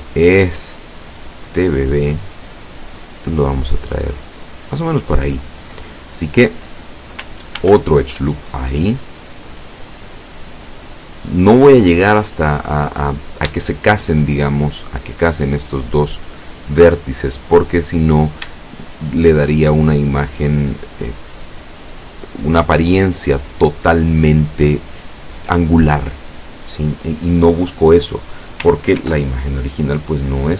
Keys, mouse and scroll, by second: 0.6 right click, 1.5-5.2 drag, 7.6 ctrl+r, 8.3 click, 11.1 click, 13.0-13.4 scroll up 2, 13.7 shift+middle click, 14.4-14.9 shift+scroll up 2, 17.5-17.9 scroll down 1, 18.9-20.2 shift+middle drag, 29.0 ctrl+r, 30.0 click.